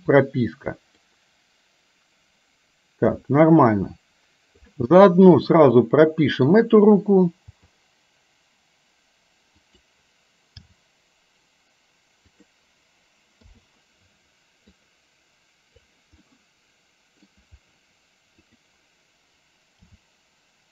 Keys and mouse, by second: 1.2-4.8 drag, 5.5 click, 5.8 middle click, 7.5 g, 10.7 g, 13.4 i, 14.8-15.9 drag, 16.2-17.3 middle drag, 18.4 click, 19.9 g.